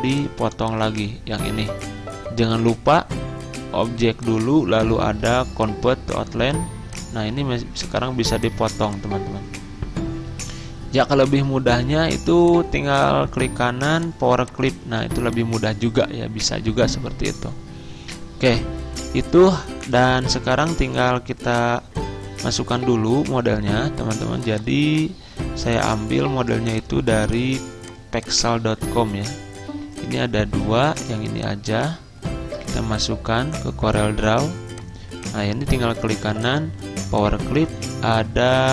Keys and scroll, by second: 11.3 ctrl+z, 31.9 alt+Tab.